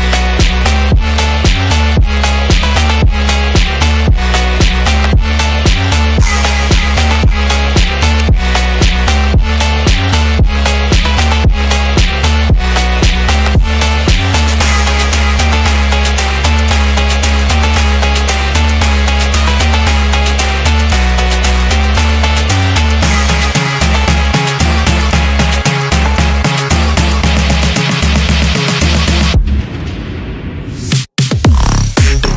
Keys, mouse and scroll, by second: 1.8 middle click, 2.8 middle click, 3.4 shift+a, 12.5 middle click, 14.3-14.6 scroll up 2, 15.1-15.7 middle drag, 15.1-15.6 scroll up 1, 16.2-17.2 middle drag, 18.4 click, 19.0 click, 20.4 click, 20.8 click, 22.4 click, 22.8 click, 25.1 click, 26.8 click, 27.2 click, 28.1 click, 29.0 m, 29.9 click, 30.9 shift+d.